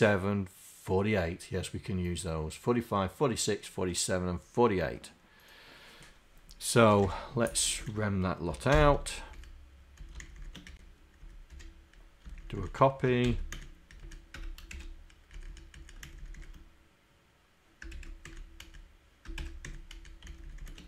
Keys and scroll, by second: 12.6 shift+Down.